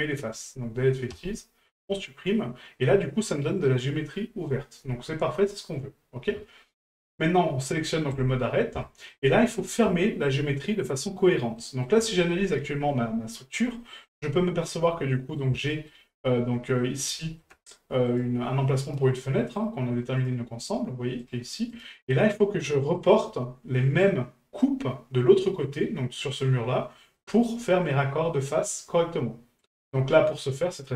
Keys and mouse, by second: 2.0-2.8 middle drag, 8.1 click, 8.8-9.1 shift+middle drag, 9.4-9.8 middle drag, 10.0 shift+middle drag, 10.6-11.2 middle drag, 11.6 middle click, 12.1 shift+middle drag, 13.8 middle drag, 15.1 middle drag, 15.7 shift+middle drag, 16.8 middle drag, 17.2 shift+middle drag, 18.1 right click, 18.8 right click, 19.6 right click, 20.2 right click, 21.2 right click, 21.7 right click, 22.1 middle drag, 23.0 right click, 23.8 middle drag, 27.1 middle drag, 28.6-29.6 middle drag.